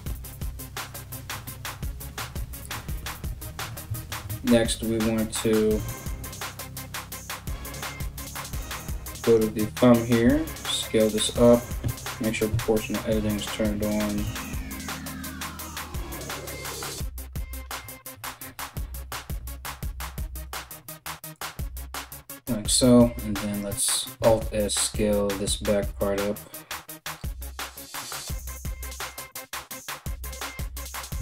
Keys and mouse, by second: 5.4 KP_3, 6.4 KP_1, 8.0 3, 8.8 alt+right click, 9.9 s, 11.4 o, 12.1 s, 14.9 o, 16.5 s, 23.1 alt+right click, 23.9 alt+s, 28.6-31.2 middle drag, 30.8 KP_1, 31.1 KP_Enter.